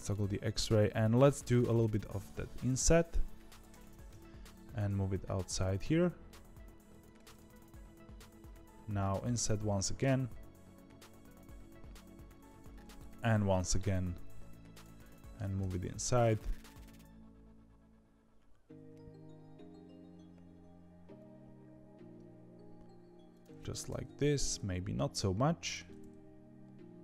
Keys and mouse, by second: 1.4 i, 4.0 KP_1, 4.6 g, 7.4 KP_3, 8.8 i, 14.9 middle click, 15.3 g, 23.8 KP_3, 24.5 s, 25.8-27.0 middle drag.